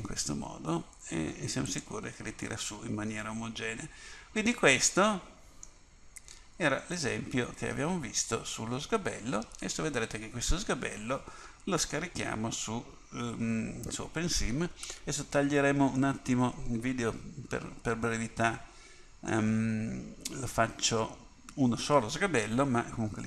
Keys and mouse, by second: 2.6-4.4 middle drag, 7.0-8.5 middle drag, 8.5 middle click, 16.1-17.9 middle drag.